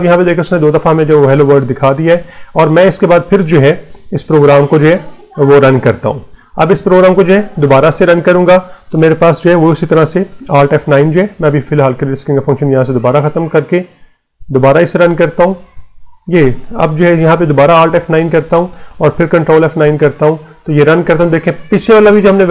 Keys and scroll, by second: 1.5 Return, 11.0 Down, 12.2 Right, 14.2 BackSpace, 17.6 alt+F9, 18.3 Return, 19.3 ctrl+F9.